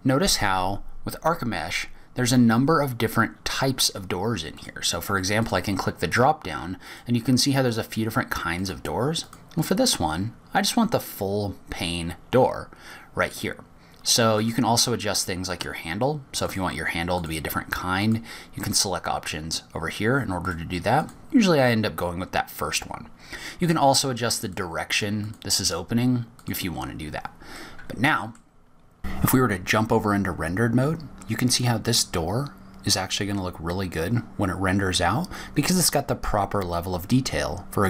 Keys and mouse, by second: 5.4-6.3 drag, 7.7-8.6 drag, 9.4-10.2 drag, 15.2-16.4 drag, 17.3-18.1 drag, 18.8-19.6 drag, 21.2-21.9 drag, 24.5-25.4 drag, 26.1-27.3 drag, 28.3-29.1 middle drag, 31.4 click.